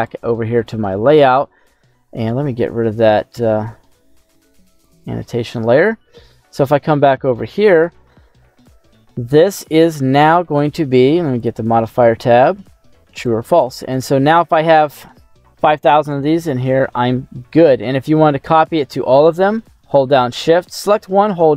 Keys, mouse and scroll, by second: 0.0 click, 0.9 middle click, 2.5 q, 5.4 scroll down 1, 6.0 middle click, 6.7-7.3 scroll up 3, 7.3 middle click, 9.8 scroll down 1, 11.4 click, 13.1 click, 13.7 middle click, 18.5 right click.